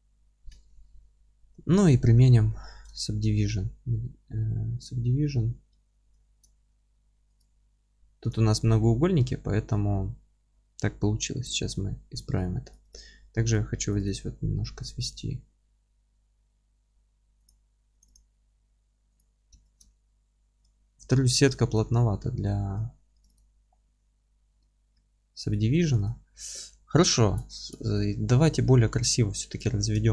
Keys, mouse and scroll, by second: 0.6-7.4 alt+middle drag, 2.2 ctrl+2, 5.8 Tab, 6.6 2, 7.4 click, 7.7 scroll up 1, 8.1 3, 8.2 click, 8.5-8.8 scroll down 1, 8.8-12.7 middle drag, 11.2 ctrl+x, 12.4 2, 12.8 click, 14.0 click, 15.1 s, 17.4 click, 18.0 click, 18.6 s, 19.5 Tab, 19.9-23.2 alt+middle drag, 20.7-21.1 scroll up 2, 21.1 Tab, 23.3 click, 23.6 scroll down 1, 23.9 Tab, 24.1-24.5 scroll up 1, 24.5 Tab, 25.5 click, 26.2 ctrl+z, 26.2-30.1 middle drag, 27.9 z, 28.3 Tab.